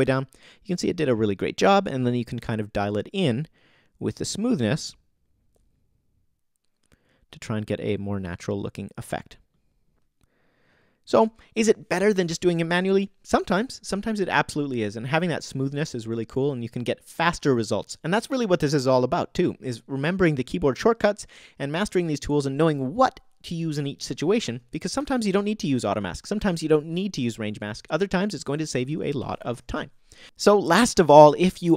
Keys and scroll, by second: 24.4 o, 29.5 o.